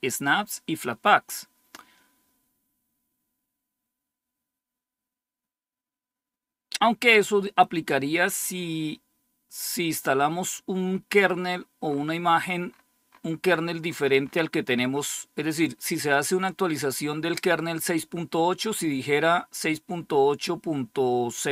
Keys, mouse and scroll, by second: 11.2-15.2 scroll up 3.